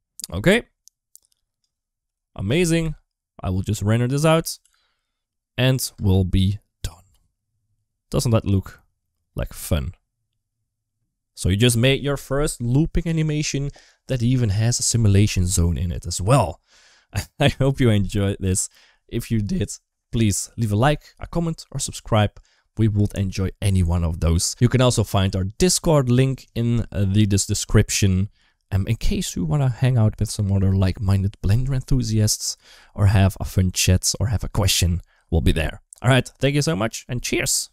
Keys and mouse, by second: 0.1 space, 0.9 click, 1.8 r, 2.6 g, 4.2 r, 5.7 space, 7.9 space, 8.3-11.4 drag, 15.9 middle click.